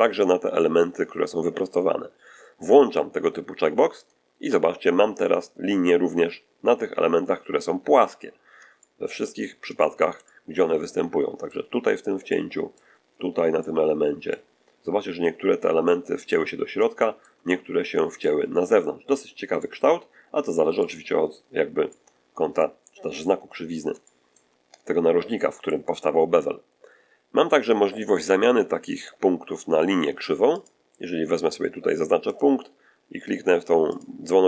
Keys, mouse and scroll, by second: 3.9 click, 8.1-8.4 scroll down 1, 8.7 shift+middle click, 8.8-9.2 shift+scroll down 1, 9.7 shift+middle click, 10.8 middle click, 12.2 middle click, 13.5 middle click, 14.6-15.0 scroll up 1, 16.1-16.6 scroll down 1, 16.9 shift+middle click, 18.0 middle click, 19.2 scroll down 1, 19.5-20.9 middle drag, 21.8 middle click, 23.2 scroll up 1, 23.9 shift+middle click, 30.4 click, 32.2 click, 33.8 click.